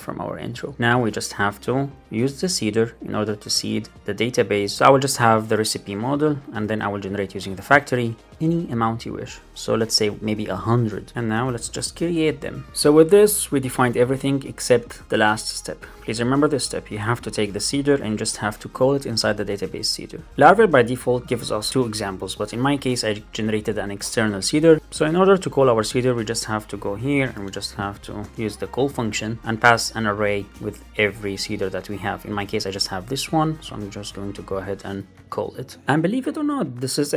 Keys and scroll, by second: 4.7 shift+super+Left, 5.8 Return, 7.1 Return, 10.6 Right, 12.8 shift+super+Right, 13.6 Right, 13.8 shift+super+Left, 17.4 super+c, 20.6 shift+Down, 21.2 shift+super+Right, 21.4 shift+Down, 22.2 Right, 26.2 Return, 28.1 Return, 29.4 Return, 30.5 super+z, 30.7 Left, 31.0 Return, 31.4 super+v, 32.3 ctrl+space, 33.1 Return, 34.8 Down, 35.3 alt+super+l, 35.5 super+s.